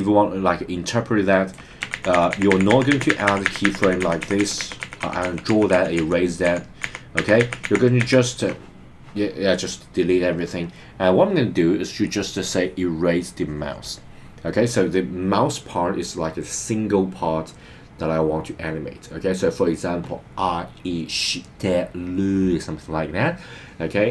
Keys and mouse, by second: 1.9 super+z, 2.2 super+z, 2.3 super+z, 2.5 super+z, 2.7 super+z, 2.9 super+z, 3.1 super+z, 3.3 super+z, 3.4 super+z, 3.6 super+z, 3.8 super+z, 4.0 super+z, 4.2 super+z, 4.4 super+z, 4.6 super+z, 4.8 super+z, 5.0 super+z, 5.2 super+z, 5.4 super+z, 5.7 super+z, 6.0 super+z, 6.4 super+z, 6.8 super+z, 7.1 super+z, 7.4 super+z, 7.6 super+z, 8.0 super+z, 12.0 click, 13.2 click.